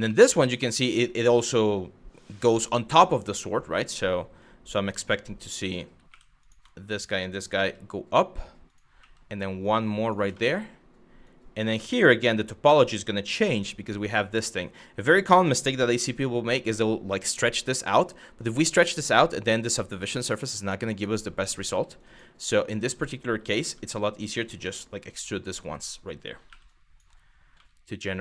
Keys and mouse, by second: 4.1 click, 4.9 click, 5.7 2, 6.5 click, 7.2 e, 8.3 click, 8.6 e, 9.6 click, 10.0 middle click, 11.0 click, 11.9 1, 12.2 click, 12.9 g, 13.7 click, 14.6 click, 15.4 click, 15.6 g, 20.6 click, 21.0 click, 21.3 g, 21.7 click, 21.9 g, 22.4 click, 23.2 2, 23.6 click, 24.2 e, 25.3 click, 26.3 click, 27.8 click.